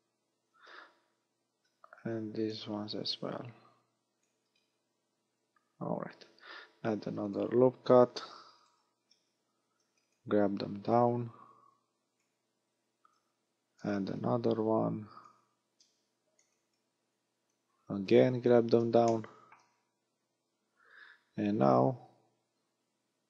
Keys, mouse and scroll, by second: 0.4 a, 2.6 b, 3.5 click, 4.6 scroll down 2, 5.0 a, 5.8-6.4 scroll up 2, 6.7 ctrl+r, 8.7 click, 9.0 a, 9.8 b, 11.0 click, 12.8 a, 13.7 ctrl+r, 15.3 click, 15.7 a, 16.5 b, 17.5 click, 19.1 shift+middle click, 21.8 a.